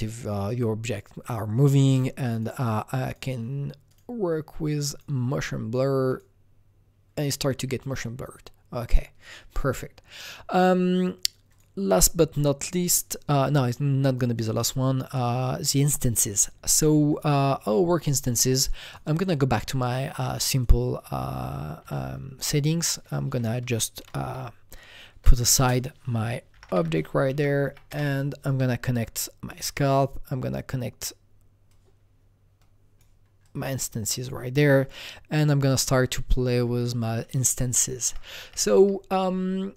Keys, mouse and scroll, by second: 1.3 click, 2.3 click, 3.0 click, 4.9 click, 8.3 click, 10.1 click, 10.2 click, 11.5 click, 11.9 click, 12.4 click, 14.4 click, 16.7 click, 19.1 click, 20.6 click, 21.8 Delete, 22.9 click, 23.7-25.5 ctrl+drag, 25.5 ctrl+space, 26.5 typing, 27.3 Down, 27.6 Up, 27.9 Return, 29.6-34.0 drag, 34.0 click, 34.9 click, 36.8 click, 38.0 Right, 38.4 Right, 38.7 Right, 39.2 Right.